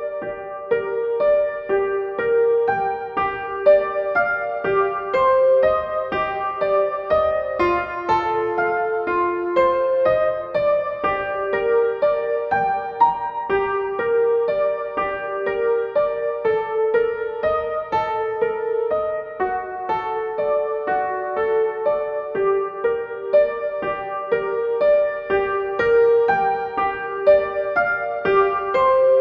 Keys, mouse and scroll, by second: 6.3-10.3 drag, 10.3 click, 11.2 Down, 12.8-23.2 drag, 25.8-29.2 drag.